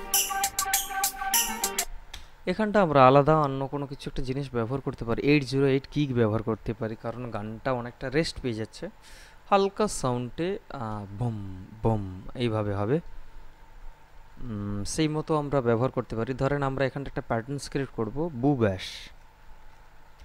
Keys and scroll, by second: 2.4 space, 19.5 shift+b, 20.0 o.